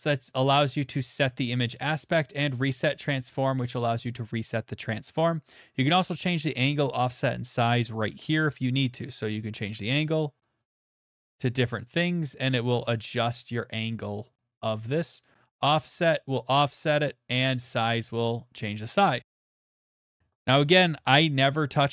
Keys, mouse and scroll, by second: 2.2 click, 4.1 right click, 6.7 middle click, 8.4 right click, 9.6 click, 10.8 click, 12.0 click, 13.6 right click, 15.7 click, 17.6 right click, 18.8 click, 19.3 click, 20.8 0, 21.1 Return.